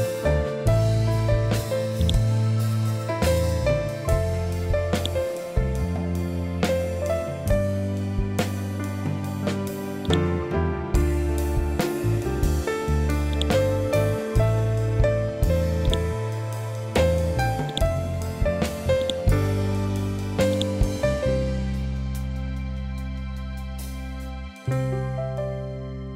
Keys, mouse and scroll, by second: 1.9-4.9 drag, 4.9-8.1 shift+drag, 8.1-8.8 scroll up 1, 10.0-13.2 drag, 13.2-17.6 shift+drag.